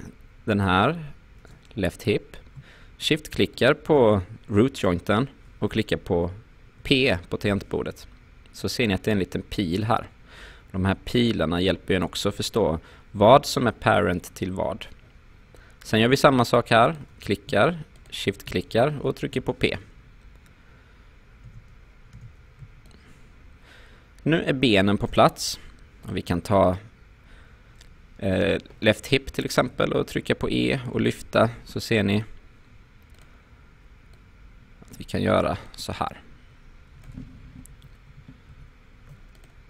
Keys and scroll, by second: 6.8 p, 19.3 p, 21.5 space, 29.7 e, 37.7 ctrl+z.